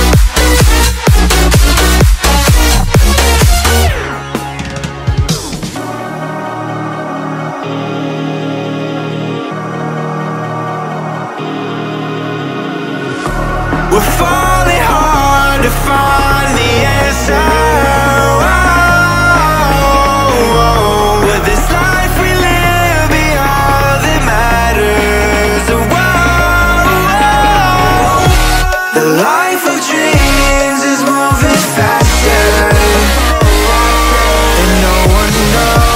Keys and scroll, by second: 0.1 ctrl+z, 2.9 ctrl+j, 4.9 ctrl+[, 5.8 ctrl+[.